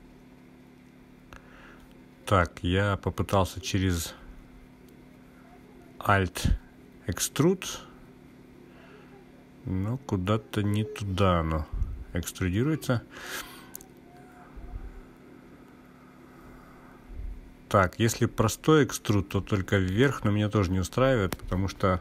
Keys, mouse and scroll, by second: 5.1 click, 7.7 ctrl+z, 9.6 e, 12.3 click, 16.1 e, 17.0 z.